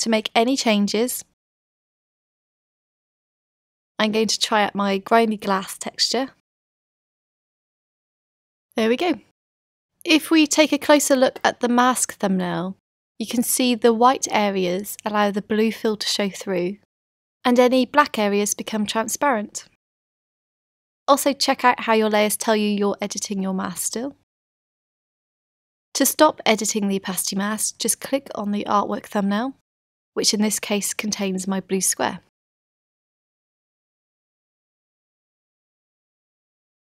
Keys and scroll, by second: 8.2 v.